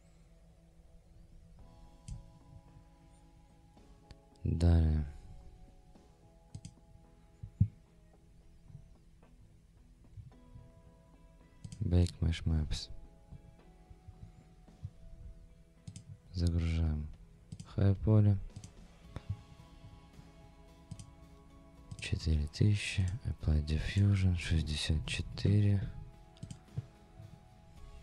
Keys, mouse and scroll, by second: 18.5 click.